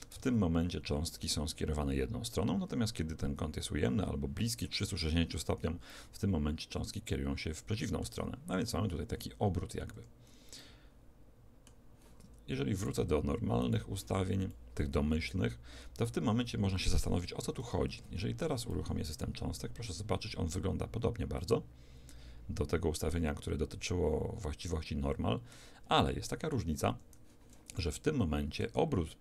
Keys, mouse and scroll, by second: 0.2 alt+a, 5.9-10.0 middle drag, 10.0 Escape, 10.6-12.4 middle drag, 12.8 click, 14.5-17.2 middle drag, 18.0 alt+a, 18.7-27.6 middle drag, 26.9 Escape.